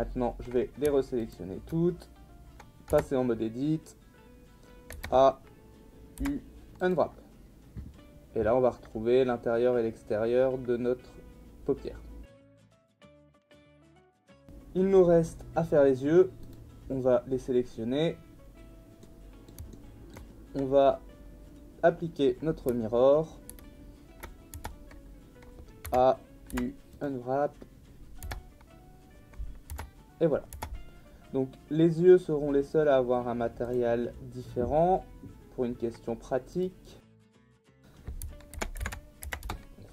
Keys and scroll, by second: 2.9 Tab, 4.9 a, 6.2 u, 12.7 Tab, 23.5 ctrl+a, 24.5 Tab, 25.8 a, 26.5 u, 28.2 Tab, 29.4 Tab, 38.3-39.7 typing.